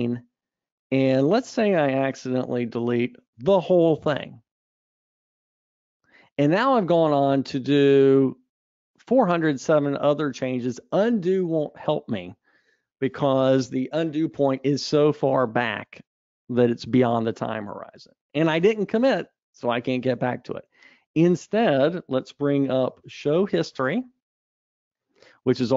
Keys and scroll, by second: 2.7 alt+Up.